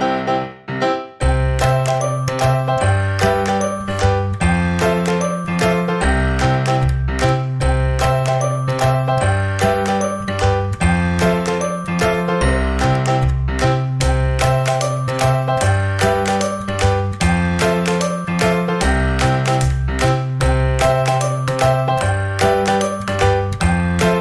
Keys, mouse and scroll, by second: 0.5-5.0 right drag, 5.0 click, 6.8 a, 9.9 click, 10.7 right click, 11.6 click, 14.5-16.1 right drag, 16.1 click, 16.3-19.4 right drag, 19.4-21.0 drag, 21.0-22.6 right drag, 22.6 click, 23.4-24.2 right drag.